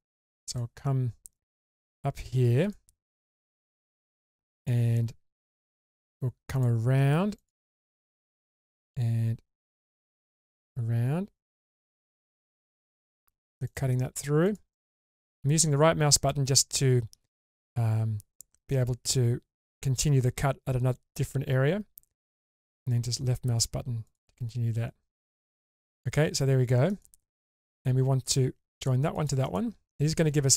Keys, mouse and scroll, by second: 25.6-26.1 scroll down 1.